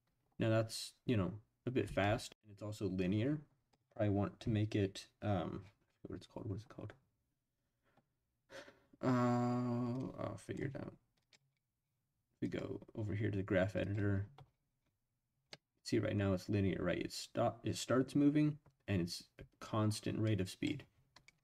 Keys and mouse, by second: 1.8 space, 3.0-3.7 drag, 10.0 click, 11.3 click, 11.5-12.1 drag, 12.4-13.9 drag, 15.5 middle click, 17.7-20.6 drag.